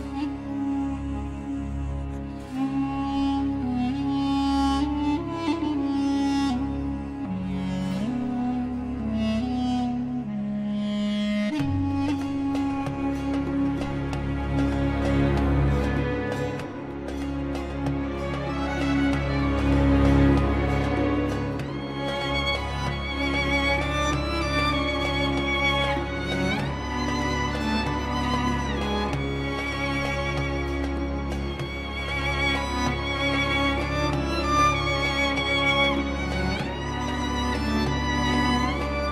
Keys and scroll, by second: 1.4 ctrl+z, 1.7 Escape, 2.3 ctrl+z, 3.4 ctrl+z, 3.9 Escape, 4.8 ctrl+z, 7.6 shift+Page_Down, 7.9 shift+F2, 8.3 F3, 8.7 Escape, 9.7 ctrl+z.